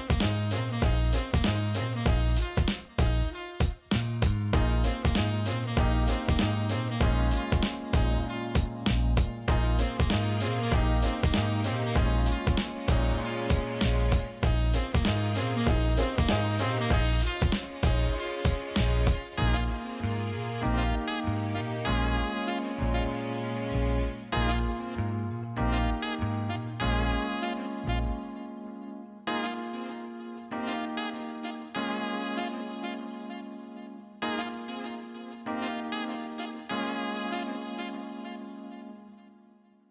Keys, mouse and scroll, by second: 1.6-4.9 drag, 4.9 Tab, 6.2 click, 6.8 click, 7.7-12.3 drag, 12.3 Tab, 13.2-13.7 alt+middle drag, 14.3-18.6 drag, 20.8 shift+click, 22.1 Tab, 24.5 click, 25.4 click, 26.6 alt+middle click, 27.1 alt+middle click, 28.0-28.5 drag, 28.7 alt+middle drag, 29.9 alt+middle drag, 33.8-39.9 drag.